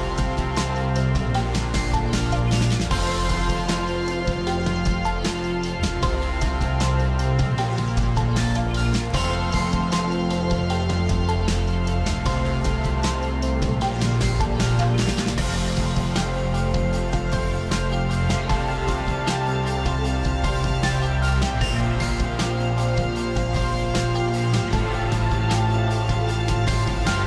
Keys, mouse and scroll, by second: 3.0 click, 4.2 click, 7.3 ctrl+alt+shift+e, 9.6 click, 9.6 click, 11.0 b, 11.8 g, 13.4 click, 16.5 click, 18.6 click, 21.6 click, 22.6 click, 24.2 click.